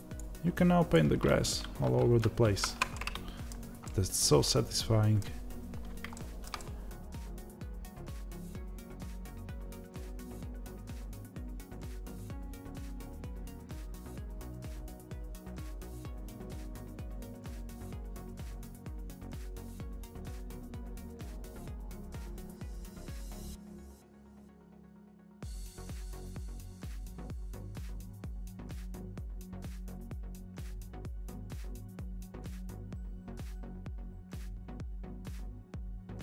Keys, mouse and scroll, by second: 2.0 ctrl+z, 3.8-8.3 middle drag, 5.7-6.1 scroll up 1, 8.3-9.5 drag, 9.5 ctrl+z, 10.0 click, 10.3 ctrl+z, 10.4-12.4 drag, 12.4 middle click, 12.9 click, 13.3-15.1 middle drag, 13.5 ctrl+z, 14.6-15.1 shift+scroll down 2, 15.1-16.1 drag, 16.1 middle click, 16.5-18.5 drag, 17.4 ctrl+z, 18.5-19.7 middle drag, 18.8 Tab, 19.7 click, 19.9 middle click, 20.1 scroll down 2, 20.4-21.6 drag, 21.7 scroll up 1, 21.9-24.6 scroll down 1, 24.6-30.4 drag, 30.4 Tab, 31.1-36.2 shift+middle drag, 31.3 scroll up 1, 31.5 scroll down 1, 31.7 s, 34.7 Tab.